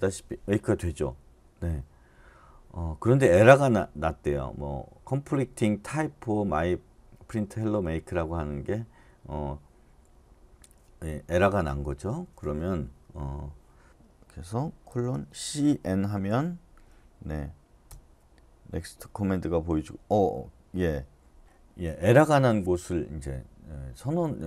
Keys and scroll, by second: 14.9-15.6 typing, 17.8 Return.